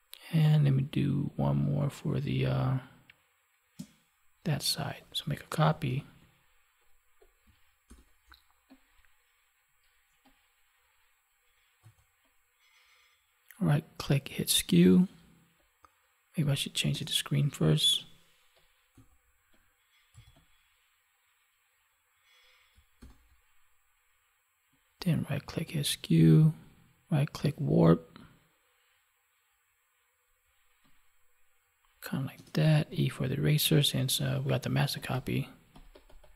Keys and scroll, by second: 5.9 ctrl+j, 7.8 ctrl+t, 23.0 ctrl+t.